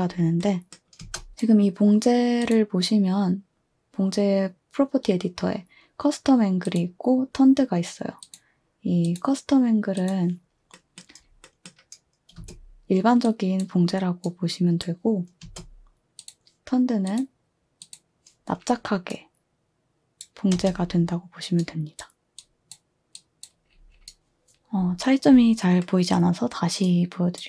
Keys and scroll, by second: 1.0 space, 12.4 space, 15.4 space.